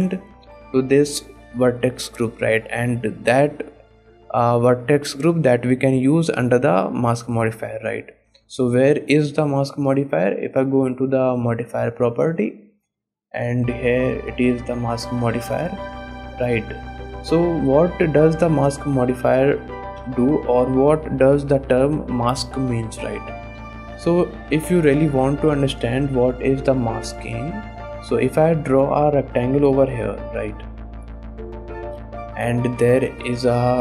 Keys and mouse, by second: 0.0 ctrl+Tab, 3.1 click, 9.2 shift+drag, 12.9-14.6 drag, 15.3 middle drag, 15.8-16.9 shift+middle drag, 17.2 middle click, 17.6 shift+middle drag, 18.6 click, 19.0 shift+click, 19.4 shift+click, 20.1 KP_1, 21.6 shift+drag, 23.4 click, 24.9 click, 26.3 shift+click, 27.6 click, 28.7-30.9 drag, 31.8 click, 32.7 click, 33.2 click.